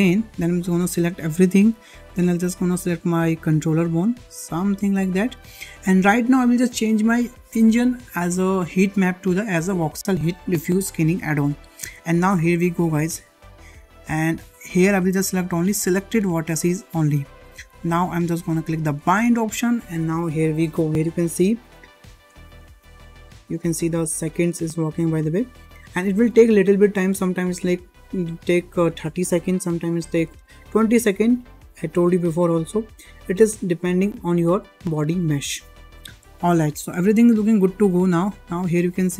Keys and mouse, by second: 1.3 click, 7.5-12.7 drag, 16.8 click, 19.1-34.5 drag, 38.1-38.5 shift+middle drag, 38.7 click.